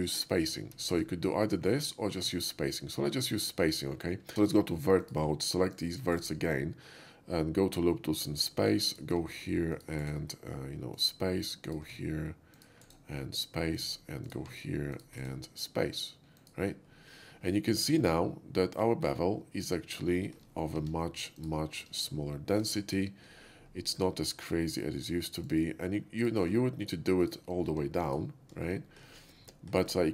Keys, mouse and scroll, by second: 0.7 ctrl+z, 1.0 ctrl+z, 3.5 ctrl+z, 4.3 Tab, 5.1 click, 5.8 ctrl+click, 6.2 ctrl+right click, 8.2 ctrl+click, 8.9 click, 9.8 ctrl+click, 10.1 ctrl+right click, 11.0 ctrl+click, 11.7 ctrl+click, 12.6 ctrl+click, 12.9 ctrl+right click, 13.8 ctrl+click, 14.3 ctrl+click, 15.2 ctrl+right click, 16.4 ctrl+click, 18.1-20.0 middle drag, 20.2 shift+middle click, 20.8 Tab, 21.4 alt+Tab, 21.4 click, 23.5 alt+middle click, 25.5 shift+click, 26.2 shift+click, 27.3 ctrl+click, 27.7 x, 28.1 click, 28.8 shift+middle click, 29.9 shift+middle click.